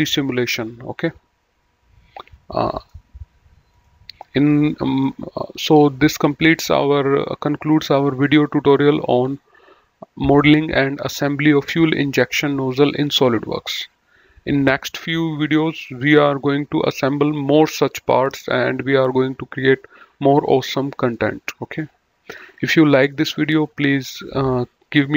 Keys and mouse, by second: 3.7 click, 4.2 middle click.